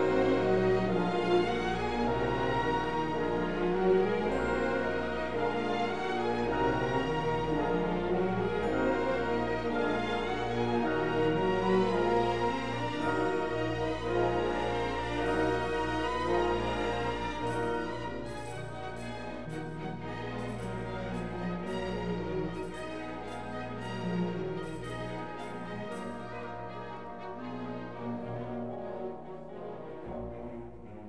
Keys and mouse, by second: 0.4 KP_1, 3.4 Tab, 6.0 click, 7.6 shift+s, 9.0 Tab, 10.1-11.6 right drag, 13.6 KP_Divide, 14.9 KP_1, 15.9 click, 16.4 r, 16.6 y, 18.3 click, 20.4 KP_3, 21.6 shift+click, 22.9 g, 23.7 y, 25.7 click, 28.1-30.5 typing, 29.3 click.